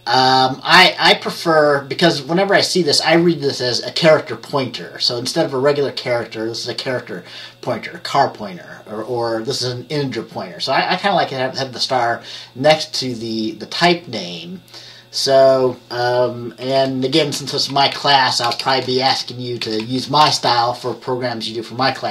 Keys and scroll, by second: 16.7 typing, 17.5 Down, 17.6 Down, 17.9 Down, 18.0 Down, 18.5 BackSpace, 18.7 BackSpace, 19.2 Down, 19.7 Right, 19.9 Right, 20.3 BackSpace, 20.5 BackSpace.